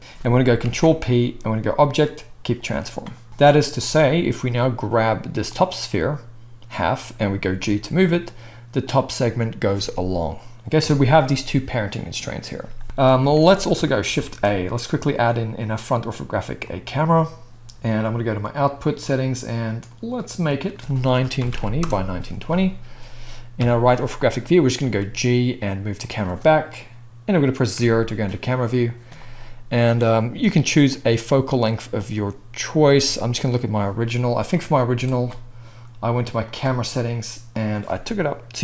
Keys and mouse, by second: 0.6 ctrl+p, 3.3-8.9 right drag, 4.6 click, 4.6 middle click, 7.5 g, 8.9-18.6 middle drag, 10.8 KP_1, 13.3 alt+a, 14.2 shift+a, 18.6 click, 18.7-20.4 middle drag, 20.4-26.1 drag, 23.6 KP_3, 24.8 g, 26.1-34.5 middle drag, 27.7 KP_0, 34.5-36.5 drag, 36.5-37.5 middle drag, 37.5-38.6 drag.